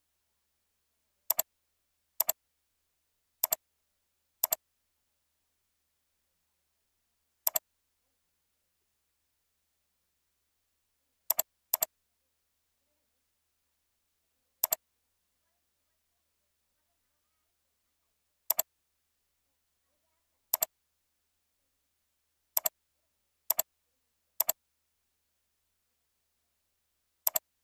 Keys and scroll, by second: 25.4 ctrl+v.